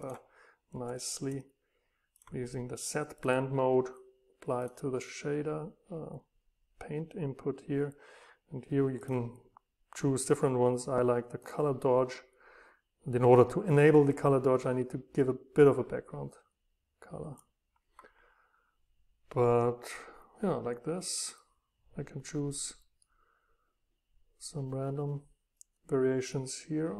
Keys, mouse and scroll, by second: 0.0-2.1 right drag, 4.7-6.8 right drag, 16.3-18.5 scroll down 1, 20.3-20.7 scroll down 2, 20.7 scroll up 1, 23.2 scroll up 1, 25.0 scroll down 1.